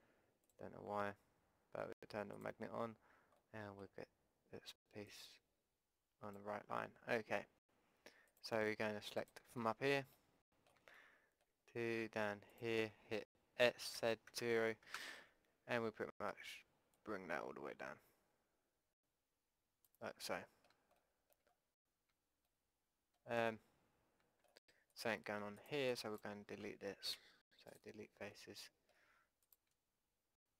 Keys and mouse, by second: 4.3 middle click, 5.0-7.1 drag, 7.1-8.3 middle drag, 8.3-10.6 drag, 10.6 middle click, 12.5-14.6 drag, 13.7 s, 16.9-18.9 drag, 20.2-22.6 drag, 23.8-24.9 middle drag, 24.9-27.1 drag, 27.1 Delete, 28.3 middle click, 29.4-30.5 drag.